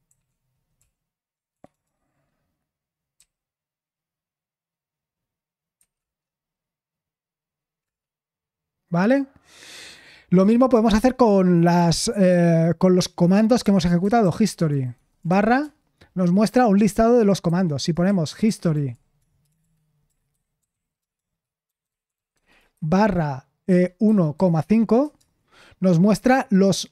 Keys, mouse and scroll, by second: 0.0 ctrl+o, 0.7 ctrl+p, 1.5 BackSpace, 1.7 BackSpace, 1.8 BackSpace, 13.7-15.7 typing, 17.8-23.5 typing, 25.0 typing.